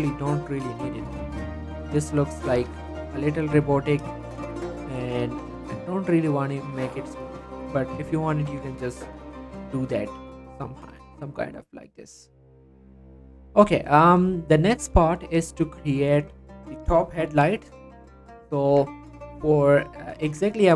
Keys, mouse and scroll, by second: 0.6 click, 0.9 scroll down 1, 1.1 middle click, 1.5 click, 2.3 shift+click, 2.6 shift+g, 2.9 right click, 3.9 click, 4.2 shift+click, 4.9 g, 5.2 z, 5.5-6.2 scroll up 1, 6.2-6.8 scroll down 1, 8.0 click, 8.2 scroll down 1, 8.4 middle click, 8.5 Tab, 8.8 scroll down 1, 10.6 middle click, 10.7 scroll down 1, 10.9 scroll up 1, 11.1 scroll down 1, 11.2-13.1 middle drag, 13.1 scroll up 1, 13.4 middle click, 13.7 shift+click, 14.0 shift+middle click, 15.0 shift+middle click, 17.6 middle click, 17.9 scroll up 1, 18.1 click, 18.4 Tab, 19.5 click, 20.0 shift+middle click, 20.3 Tab, 20.4 middle click.